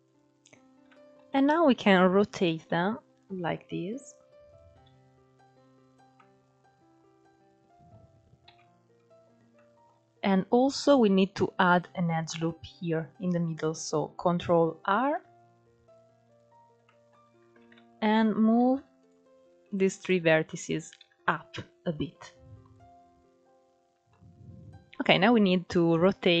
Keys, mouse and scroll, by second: 0.1-0.5 scroll up 2, 0.5-2.3 shift+middle drag, 2.3 r, 4.5 g, 5.8-8.1 middle drag, 8.1 KP_3, 9.0 scroll down 1, 9.2 shift+middle click, 9.7-10.1 scroll down 5, 10.1-13.2 scroll up 5, 14.6 ctrl+r, 16.5 shift+middle click, 16.9-17.3 scroll up 2, 17.3 alt+z, 18.3 ctrl+1, 18.6 click, 19.3 shift+click, 20.7 alt+z, 21.2-22.4 drag, 22.6-24.3 scroll down 10, 23.6 middle click, 24.8-26.4 scroll up 2.